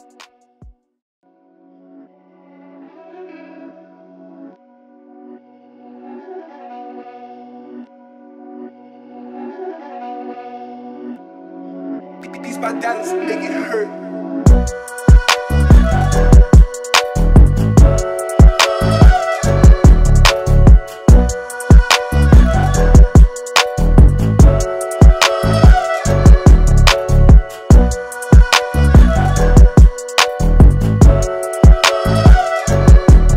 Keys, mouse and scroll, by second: 5.6 typing, 9.0 alt+scroll up 1, 9.3 typing, 9.5 click, 13.7-19.7 drag, 19.7-33.3 drag.